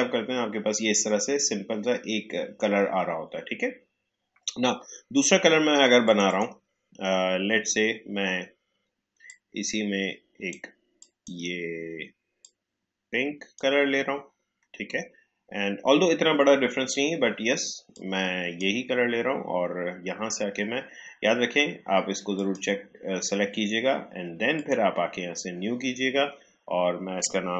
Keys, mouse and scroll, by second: 6.0 click, 9.2-15.9 drag, 17.9-22.3 drag.